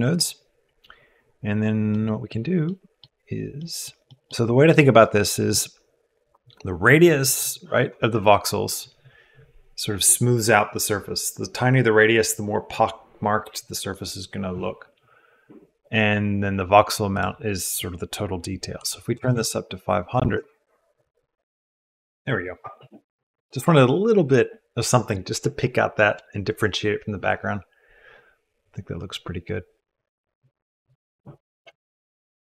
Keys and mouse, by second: 1.9 click, 2.6 click, 3.7 click, 4.1 click, 4.8 click, 17.3-21.4 drag, 19.3 KP_0.